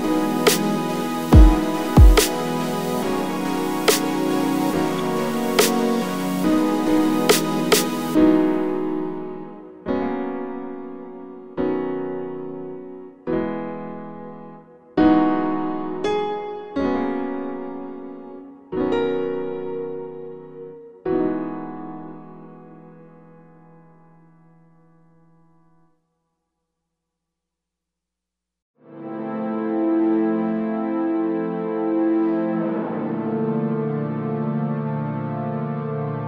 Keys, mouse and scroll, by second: 0.5 KP_Enter, 1.8 ctrl+s, 3.0 click, 4.0-9.8 drag, 4.3-5.0 scroll up 1, 5.0 ctrl+s, 7.4 z, 10.4 ctrl+s, 12.8-13.7 scroll down 1, 19.4-20.1 scroll up 1, 20.1 ctrl+b, 22.2 scroll up 1, 23.6-24.5 scroll up 1, 24.5 click, 25.0-25.6 drag, 27.0 x, 28.1 ctrl+s, 31.5 ., 32.2 r, 34.4 KP_Enter, 34.7 r, 35.0 KP_Enter, 35.4 g.